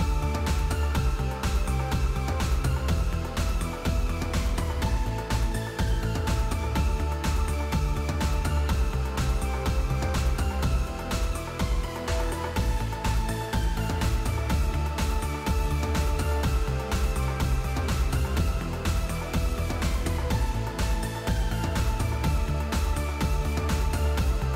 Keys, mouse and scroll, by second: 0.7-4.7 typing, 6.8-8.7 typing, 10.3-11.0 typing, 13.1 click, 13.8-15.0 typing, 16.8 click, 17.4 click, 17.6 space, 18.6 space, 18.8 space, 19.3 space, 20.1 click, 20.4 click, 21.5 click, 22.6 click, 22.7 click.